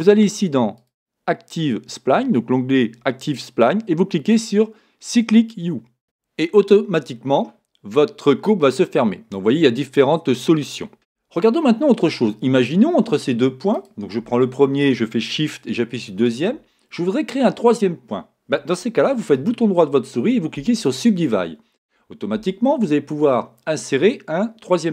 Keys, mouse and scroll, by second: 0.7 click, 1.5-3.2 scroll down 1, 10.4 click, 13.7 click, 16.2 shift+click, 19.3-24.9 right drag.